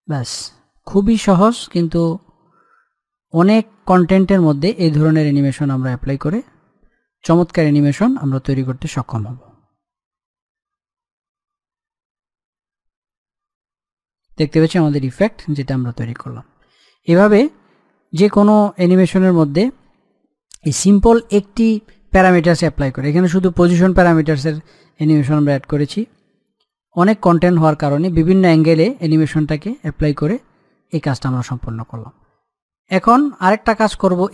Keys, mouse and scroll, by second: 0.7 middle click, 1.6-2.7 scroll down 1, 2.8 scroll up 1, 3.0 middle click, 3.9-4.5 scroll down 1, 4.5 click, 5.0 scroll up 1, 7.1 click, 13.0-14.9 scroll down 1, 31.8 click, 32.0 click.